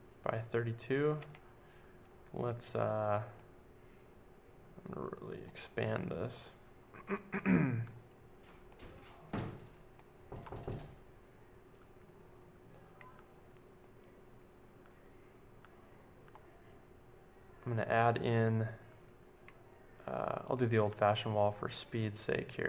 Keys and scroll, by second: 0.0-1.7 typing.